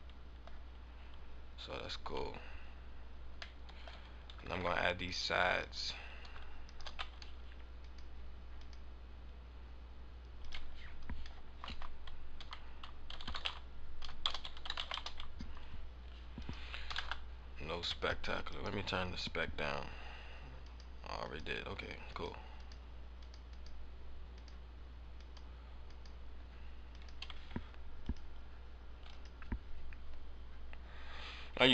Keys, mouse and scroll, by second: 0.0 middle click, 0.5 scroll down 1, 2.0 scroll down 1, 3.5 middle click, 3.8 scroll down 1, 5.1 ctrl+Tab, 5.6 right click, 6.6 shift+right click, 7.6 shift+right click, 7.8 click, 8.5 click, 10.3 click, 16.3 click, 18.5 right click, 20.6 click, 20.8 click, 21.1 click, 22.1 click, 22.4 click, 23.1 click, 23.4 click, 24.3 click, 25.1 click, 26.3-26.6 scroll down 1, 26.8 click.